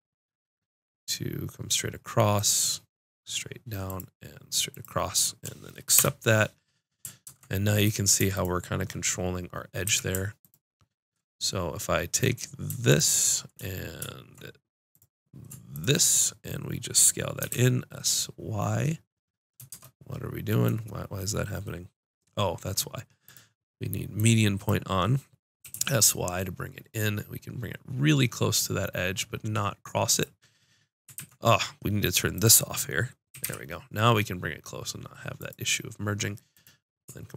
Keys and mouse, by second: 7.2 ctrl+Tab, 8.3-17.5 drag, 9.8 a, 17.4 s, 20.7-23.0 drag, 23.3-25.6 drag, 25.6 s, 30.2 click, 31.1 ctrl+z, 33.3 s, 35.3-37.3 drag.